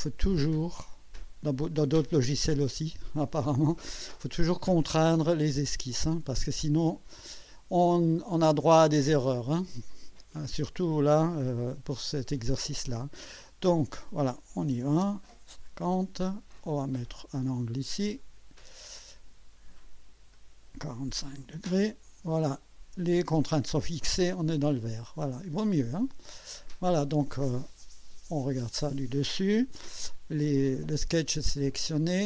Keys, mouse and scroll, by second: 0.4 click, 2.0 click, 5.7 click, 9.1 click, 13.2 click, 14.3-15.2 typing, 16.6 click, 18.2 click, 20.3 click, 21.3 KP_4, 21.6 KP_5, 22.1 KP_Enter, 25.8 click, 27.4 middle click, 31.7 click.